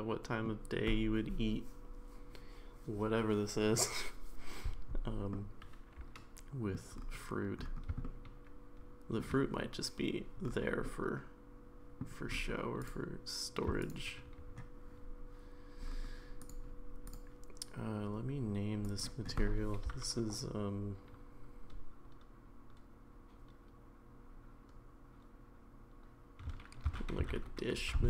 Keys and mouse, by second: 5.3-6.8 middle drag, 8.0-9.2 shift+middle drag, 10.9-12.0 middle drag, 17.0 click, 19.0-28.0 drag.